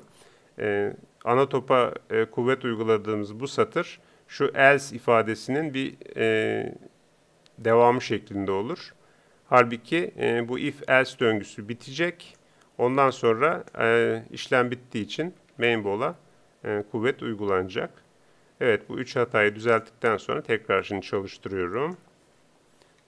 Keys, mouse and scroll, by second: 20.9 click, 21.5-23.0 drag.